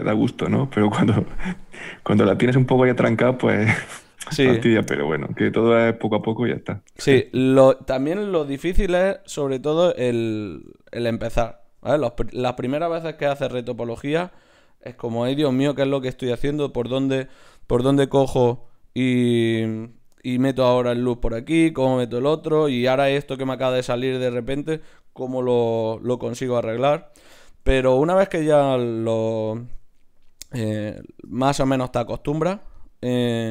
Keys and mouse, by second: 3.1 ctrl+Tab, 3.8-6.3 drag, 4.0 x, 5.0 ctrl+Tab, 7.4 click, 9.8-10.9 drag, 9.8 right click, 10.5 ctrl+Tab, 11.1 click, 11.8 f, 13.4 e, 15.1 g, 18.6-20.3 drag, 20.3 n, 22.3 n, 22.5-23.6 drag, 24.0 ctrl+Tab, 24.7 click, 25.5 g, 26.8 g, 27.8 g, 28.2-29.4 drag, 32.7-33.5 right drag.